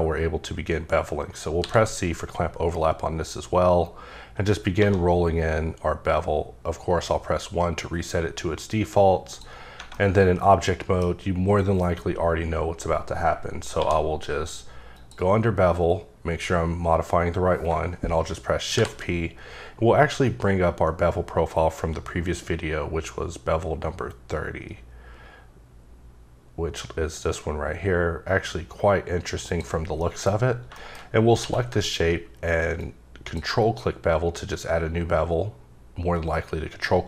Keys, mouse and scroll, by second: 1.6 c, 2.5-4.8 scroll up 12, 4.8 1, 9.3 click, 9.6 scroll down 3, 9.9 middle click, 11.1-12.9 scroll up 2, 13.8 q, 15.0 click, 17.7 click, 18.7 shift+p, 20.2-23.8 scroll up 19, 24.3-25.5 scroll up 3, 25.5-27.7 scroll down 1, 29.5 click, 30.0 middle click, 30.3 scroll up 3, 30.7 middle click, 31.0-31.4 scroll up 3, 31.4 q, 32.8 ctrl+click.